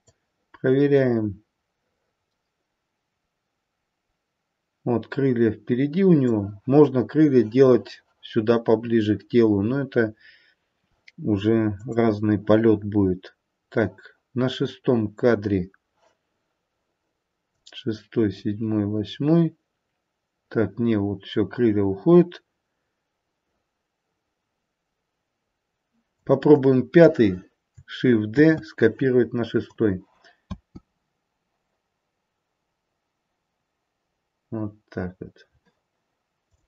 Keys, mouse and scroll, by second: 0.1 click, 11.8 click, 17.5 click, 26.5 click, 28.4 shift+d, 30.4 space, 36.5 click.